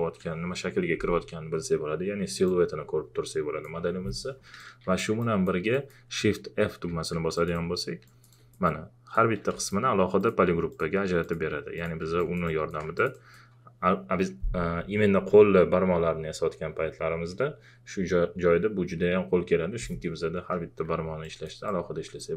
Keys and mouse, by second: 2.5-5.2 drag, 5.7 alt+click, 6.9 shift+f, 7.4 alt+click, 13.0 alt+click, 21.2 alt+click.